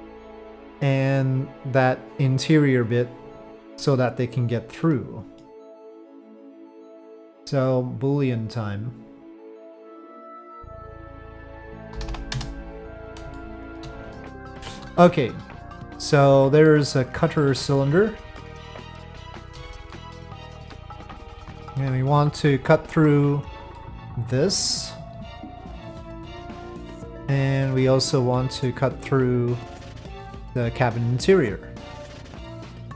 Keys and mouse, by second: 0.3-0.7 middle drag, 3.7-5.4 middle drag, 8.2-9.8 drag, 9.8 right click, 9.9-11.2 drag, 11.3-12.4 drag, 13.4 shift+middle click, 14.6 shift+middle click, 16.8-18.5 middle drag, 19.2 shift+middle drag, 19.9-20.4 middle drag, 23.7 middle click, 30.3 click, 31.7-32.9 drag.